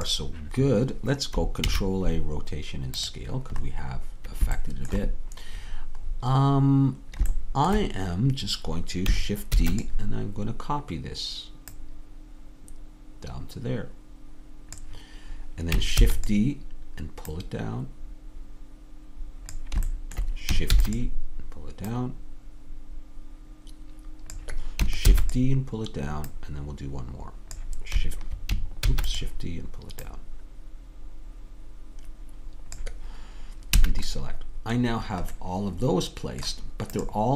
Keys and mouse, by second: 1.7 ctrl+a, 9.6 shift+d, 11.9-14.9 drag, 16.1 shift+d, 17.4-19.3 drag, 20.8 shift+d, 25.1 shift+d, 28.9 shift+d, 33.8 a, 37.0-37.3 drag.